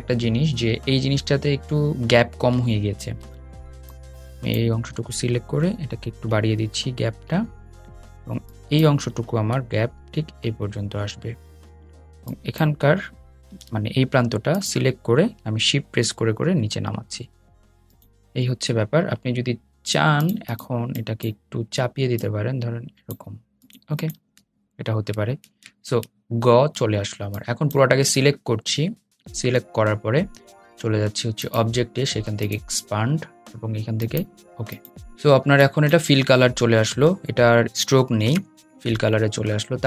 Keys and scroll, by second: 3.3 a, 6.7 Right, 10.4 Left, 11.7 a, 12.5 super+z, 14.1 a, 14.8 Down.